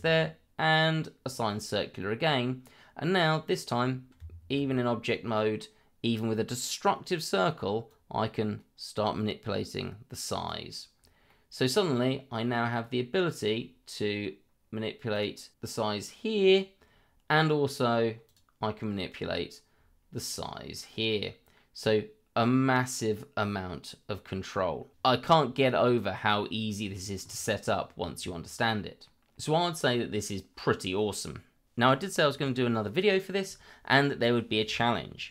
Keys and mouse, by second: 1.3 click, 2.0-3.2 middle drag, 2.8 z, 3.5 middle click, 5.1-5.6 middle drag, 7.9-10.5 drag, 11.3-11.7 middle drag, 13.5 drag, 15.5-16.5 drag, 21.1-24.9 drag, 25.2 middle drag.